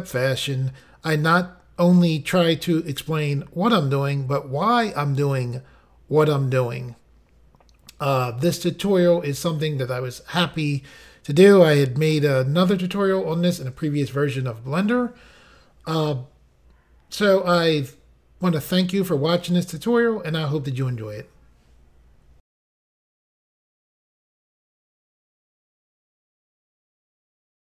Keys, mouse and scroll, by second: 1.0 g, 4.1 right click, 5.1 click, 6.3 g, 8.9 right click, 10.0 click, 11.2 g, 16.3 right click, 17.5-19.1 scroll down 3, 20.0 middle click, 22.2 Insert.